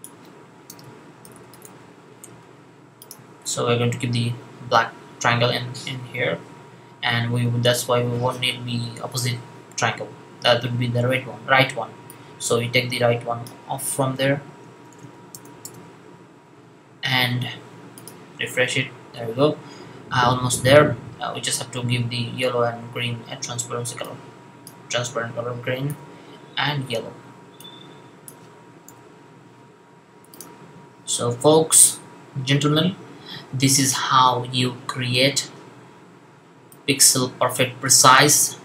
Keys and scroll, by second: 0.3-1.5 typing, 25.7 super+v, 28.7 super+v.